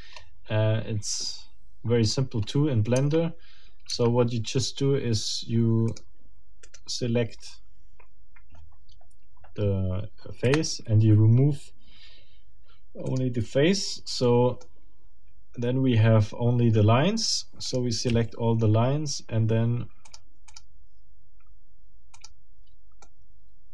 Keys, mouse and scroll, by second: 0.2-0.5 scroll up 2, 1.9 scroll down 2, 2.4 scroll up 2, 3.0 Tab, 5.9 click, 6.6 right click, 10.4 Delete, 13.1 click, 14.2 middle click, 17.6 click, 18.2 a, 20.0 middle click, 20.2 click, 20.5 click, 22.2 click, 23.0 middle click.